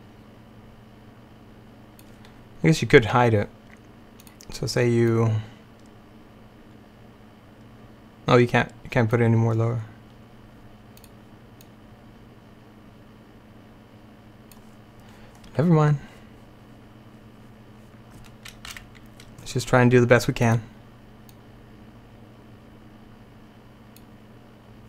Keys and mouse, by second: 4.3-14.7 drag, 18.8 Right, 20.5-22.2 drag.